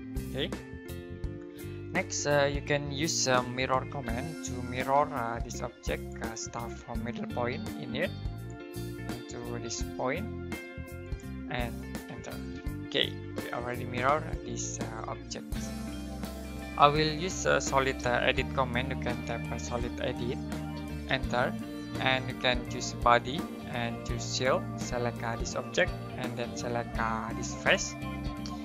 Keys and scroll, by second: 4.5-5.2 typing, 12.0 space, 17.9-19.9 typing, 21.0 space.